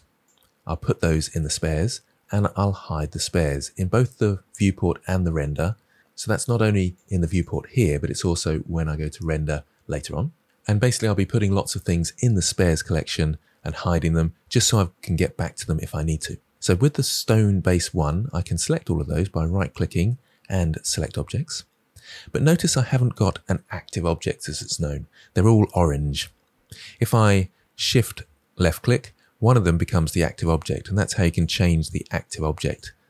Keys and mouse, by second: 0.3 click, 3.3 click, 5.3 click, 6.9 click, 7.3 click, 17.2 click, 19.4-21.0 right drag, 30.9 shift+click, 31.8 shift+drag, 32.2 shift+click.